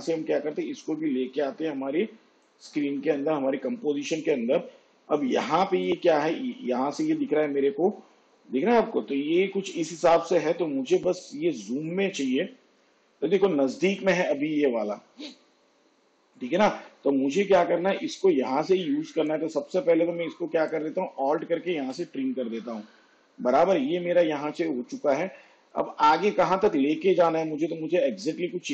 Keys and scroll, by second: 21.5 alt+].